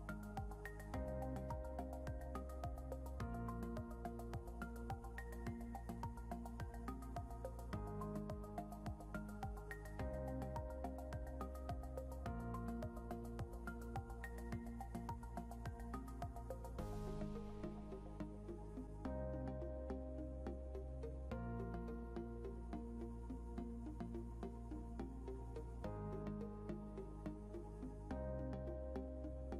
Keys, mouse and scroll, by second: 3.3 click, 6.2-7.9 typing, 9.0 click, 16.5 click, 16.5 b, 18.2-20.9 typing.